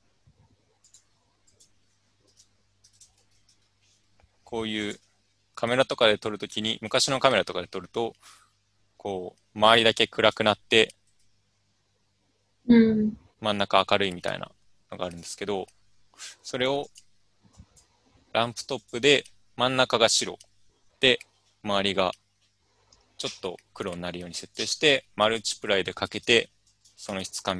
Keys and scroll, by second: 2.1-4.1 typing.